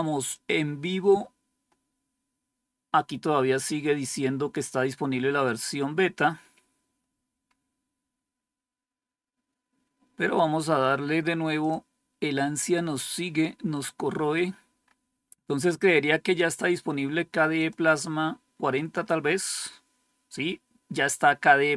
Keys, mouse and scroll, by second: 0.2 click, 5.4 click, 6.7-10.2 scroll down 4, 11.5 click, 13.0-13.6 scroll down 2, 14.2-14.9 scroll down 2, 14.9-17.5 scroll up 2, 17.5 click.